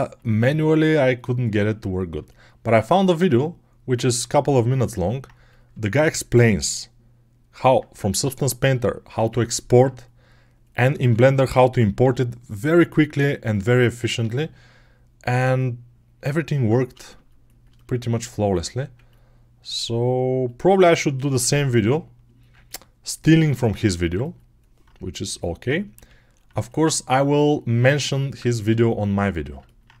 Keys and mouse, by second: 0.0 g, 0.9 right click, 1.0-11.0 middle drag, 1.2 g, 4.0 g, 6.1 g, 10.9 2, 11.0 click, 11.8-13.4 middle drag, 11.8 g, 13.4 click, 13.9-30.0 middle drag, 14.2 g, 18.7 1, 19.6 g, 21.4 g, 25.8 g.